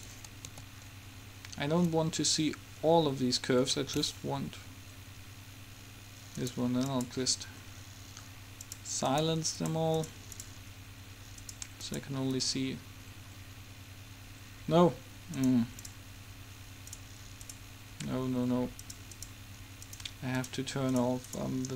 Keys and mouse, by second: 0.9 a, 6.5 click, 7.5-9.7 middle drag, 9.7-10.8 drag, 10.8-13.8 middle drag, 15.4-17.9 middle drag, 17.9-21.7 drag.